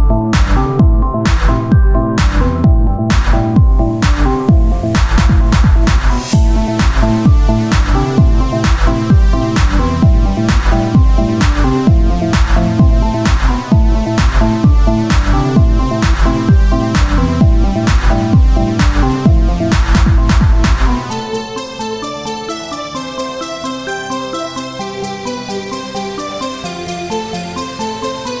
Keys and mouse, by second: 0.3 ctrl+Tab, 1.1-7.4 drag, 6.4 w, 8.2 ctrl+z, 8.5 Tab, 8.8 ctrl+z, 9.6 Tab, 9.9 ctrl+a, 10.4 Tab, 11.0 w, 12.4-15.6 ctrl+z, 15.6 w, 18.9 w, 20.6 x, 21.5 ctrl+Tab, 22.6 click, 23.6-28.4 drag.